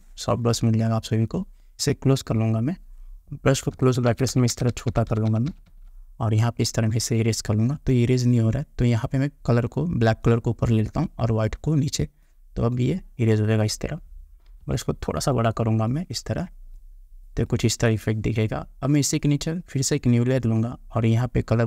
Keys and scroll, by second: 3.9 [, 14.8 ].